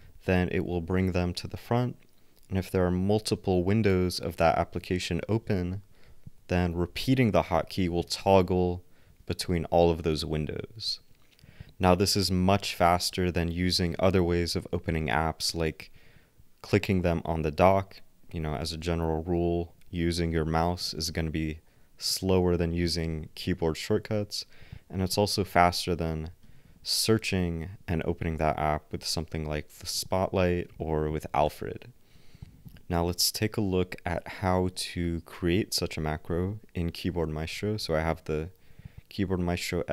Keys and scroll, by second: 0.0 ctrl+alt+c, 0.2 ctrl+alt+x, 5.4 ctrl+alt+x, 7.0 ctrl+alt+x, 8.1 ctrl+alt+x, 8.3 ctrl+alt+x, 12.5 ctrl+alt+w, 13.1 ctrl+alt+x, 14.0 ctrl+alt+c, 14.5 ctrl+alt+x, 26.4 super+space, 31.4 super+space, 32.9 ctrl+alt+w.